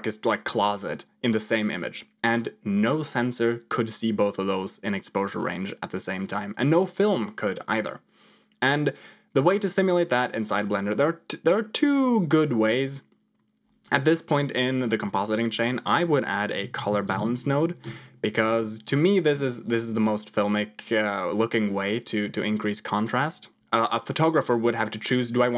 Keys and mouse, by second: 15.5-17.8 drag, 23.1 click.